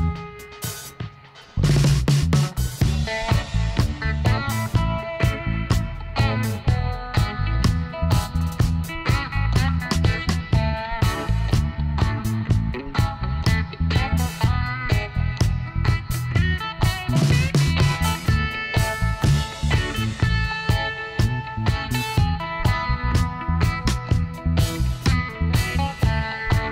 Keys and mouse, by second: 0.3-2.0 drag, 2.3 ctrl+r, 6.1-7.5 drag, 7.4 s, 10.8-13.2 middle drag, 12.1 ctrl+r, 14.0 s, 16.5-18.2 drag, 18.6 s, 21.5-23.1 drag, 23.1 ctrl+r, 24.4 s.